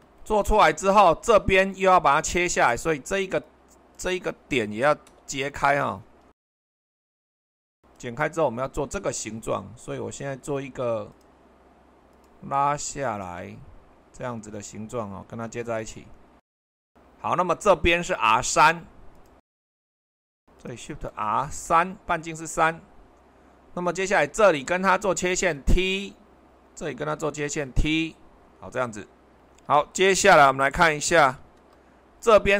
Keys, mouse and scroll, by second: 3.4-4.9 drag, 5.1 Delete, 6.8 click, 11.1-14.2 drag, 15.8 click, 16.6 Escape, 16.8 Escape, 19.2-21.1 drag, 21.1 shift+r, 21.6 3, 31.4 super+1.